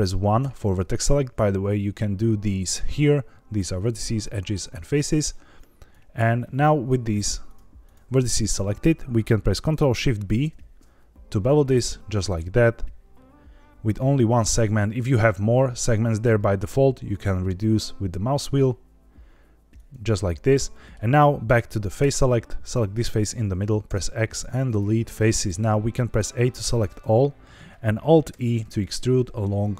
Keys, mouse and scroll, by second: 0.3 1, 4.3 click, 4.7 click, 5.0 click, 5.8 click, 7.4 shift+click, 7.8 shift+click, 10.4 ctrl+shift+b, 14.8-16.9 scroll up 2, 16.9-18.3 scroll down 6, 19.7 click, 20.6 middle click, 21.9 3, 22.5 click, 23.8 x, 26.2 a, 28.2 alt+e.